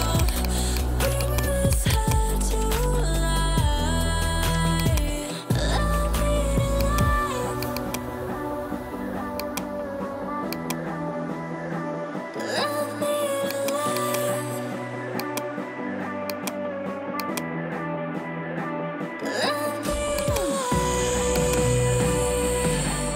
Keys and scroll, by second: 1.2 [, 4.1 ].